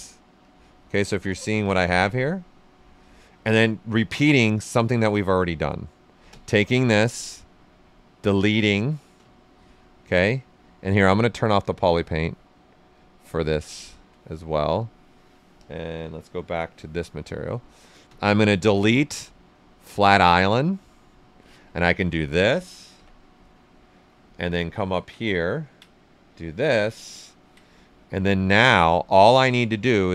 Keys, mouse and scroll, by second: 0.4 click, 1.2 alt+right click, 1.5 shift+f, 2.1-4.7 right drag, 4.8 shift+f, 6.2 space, 7.4 space, 11.6 click, 13.6 alt+right click, 14.7 click, 18.0 space, 19.8 click, 21.8 ctrl+right click, 22.9 f, 23.4 right click, 24.6 ctrl+right click, 25.4 ctrl+right click, 26.2 click, 26.7 ctrl+right click, 28.4 right click, 29.3 alt+right click, 29.7 ctrl+right click.